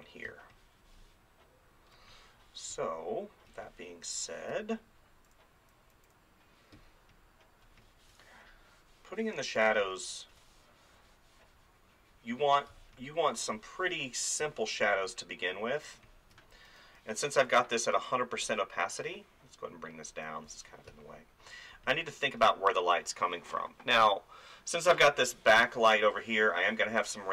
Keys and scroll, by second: 0.3 space, 5.2 [, 6.8 space, 9.6 space, 12.7 space, 16.7 [, 20.9 space.